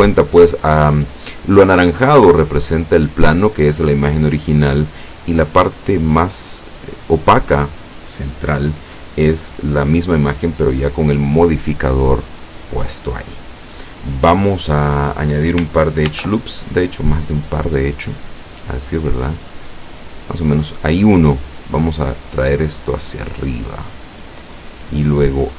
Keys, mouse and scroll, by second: 0.0 shift+click, 16.2 ctrl+r, 19.4 click, 20.3 click, 21.3 right click, 22.3-24.7 drag.